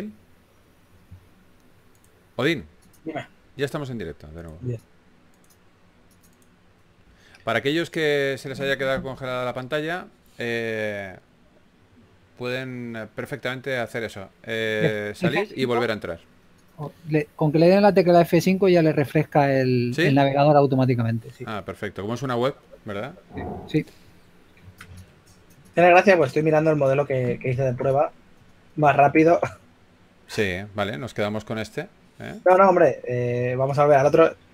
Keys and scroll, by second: 20.2-20.8 typing, 26.7-27.9 typing, 29.2 shift+f, 34.3-34.5 typing.